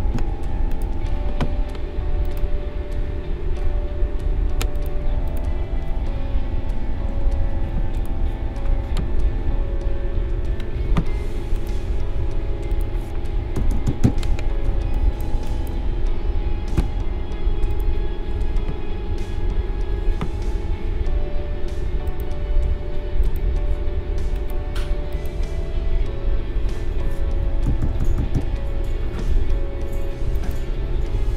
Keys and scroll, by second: 0.1 Delete, 7.0 ctrl+g, 13.5 ctrl+=, 14.6 space, 16.7 a, 27.6 ctrl+=.